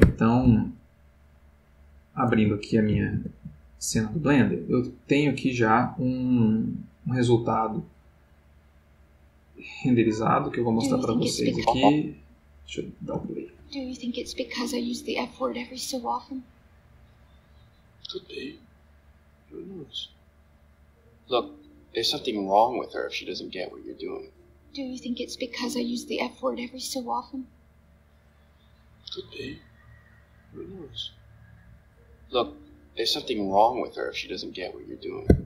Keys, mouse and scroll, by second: 0.0 Escape, 1.4 click, 2.4 alt+Tab, 8.0 click, 9.6 click, 10.7 click, 12.8 click, 13.1 space, 35.2 Escape.